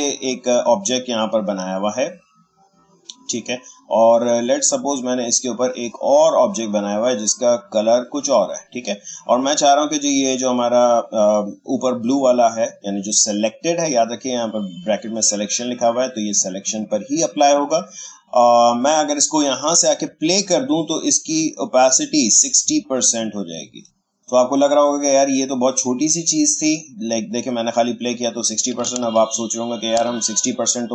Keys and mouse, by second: 5.5-7.6 drag, 22.7 click, 27.1 click, 29.0 ctrl+z.